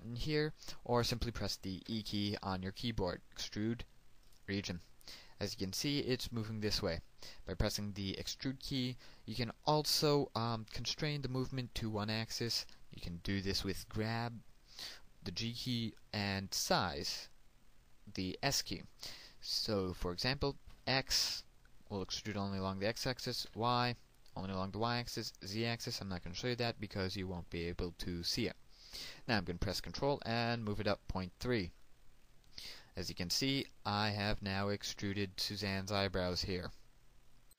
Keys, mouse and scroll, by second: 3.8 e, 6.2 click, 22.1 x, 25.4 y, 32.6 ctrl+click, 34.4-37.4 middle drag, 37.4 click.